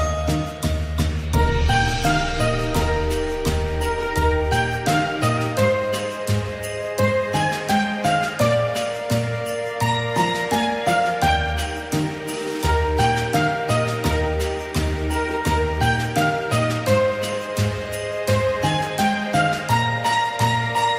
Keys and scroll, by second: 2.6 ctrl+d, 2.6 ctrl+d, 2.7 ctrl+d, 17.1 ctrl+g.